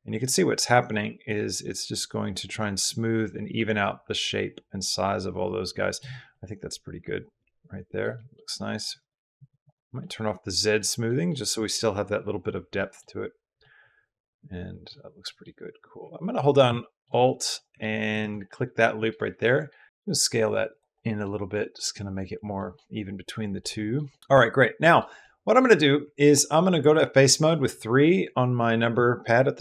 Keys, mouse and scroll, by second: 1.2-6.1 drag, 6.1-7.8 middle drag, 8.0 middle click, 8.8 click, 9.2 click, 9.4 click, 9.8 middle click, 10.9 middle click, 12.6 middle click, 13.4-14.7 middle drag, 15.1 middle click, 16.6 shift+click, 17.0 click, 18.2 click, 19.2 click, 19.7 g, 19.8 Escape, 19.8 s, 20.5 click, 20.7 middle click, 21.3 middle click, 22.4 middle click, 23.4 middle click, 23.9 middle click, 24.2 click, 24.8 middle click, 26.5 3, 27.1 click.